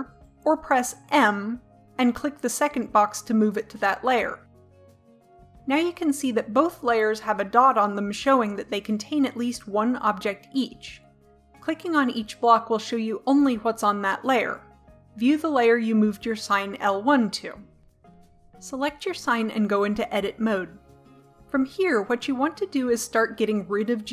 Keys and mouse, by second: 12.9-16.9 drag, 19.0 right click, 20.3 Tab.